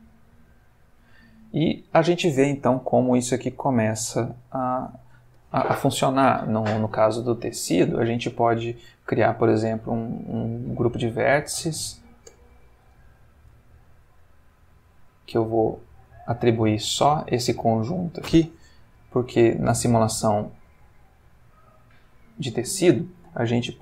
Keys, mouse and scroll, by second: 0.8-1.9 middle drag, 2.9-5.3 middle drag, 5.3 Escape, 6.4 click, 6.9-7.5 middle drag, 11.3 click, 12.3 Tab, 13.0 alt+click, 14.6 click, 16.1 click, 18.9 Tab, 21.8 click, 23.0-23.6 middle drag.